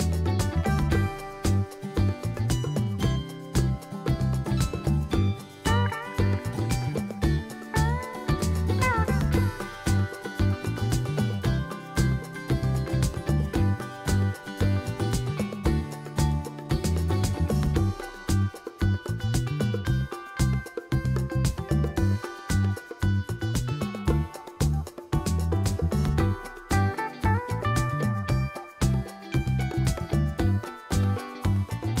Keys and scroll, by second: 27.8 s.